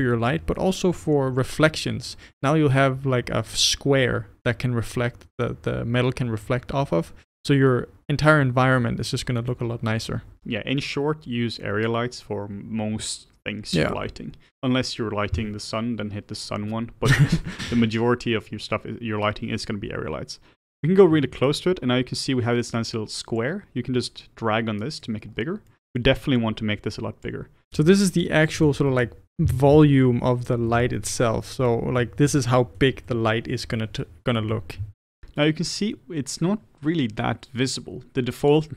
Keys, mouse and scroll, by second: 11.0-18.2 scroll up 1, 18.2-20.1 middle drag, 20.1-20.7 scroll up 1, 20.7-21.2 scroll up 2, 21.2-23.5 shift+middle drag, 25.3 scroll down 2, 25.7-27.3 middle drag, 28.9-38.7 middle drag.